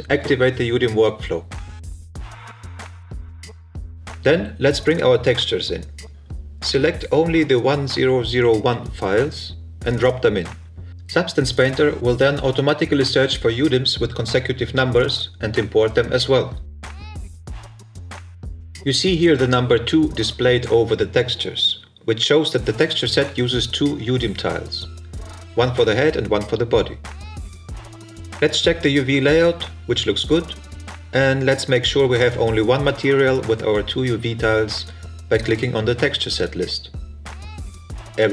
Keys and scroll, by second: 10.8 shift+h, 11.0 e, 11.3 shift+-, 12.7 shift+t, 12.9 e.